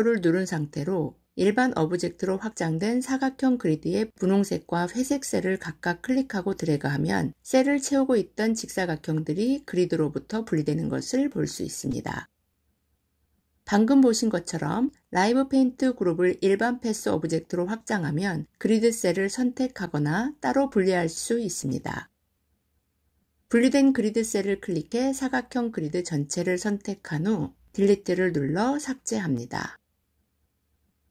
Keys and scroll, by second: 29.2 Delete.